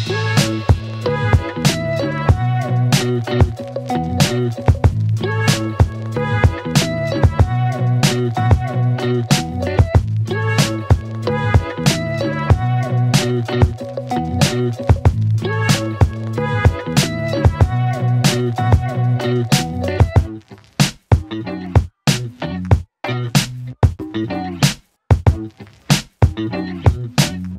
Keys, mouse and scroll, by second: 0.0 Return, 0.3 space, 5.6 space, 7.0 click, 8.7 ctrl+c, 11.5 click, 12.6 space, 12.9 click, 13.2-13.9 space, 15.9 ctrl+v, 21.2 click.